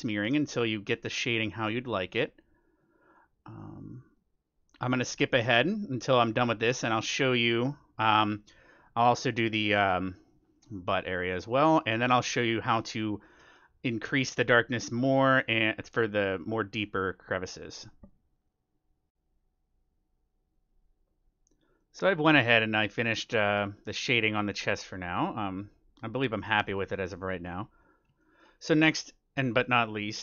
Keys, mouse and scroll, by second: 0.6-2.2 middle drag, 2.6-12.7 middle drag, 11.6-14.2 drag, 12.9-17.9 middle drag, 15.7-19.1 drag, 21.7-25.5 middle drag, 24.8-27.3 drag, 26.0-30.2 middle drag.